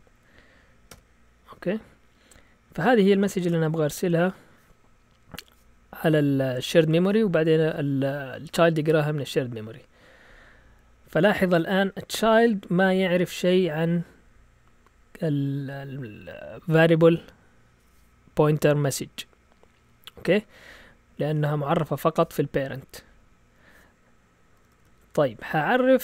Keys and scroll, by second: 0.0-0.9 typing, 3.2-4.4 typing, 11.9 Down, 12.4 Down, 12.8 Down, 24.6 Up, 24.7 Up, 24.9 Up, 25.4 Up.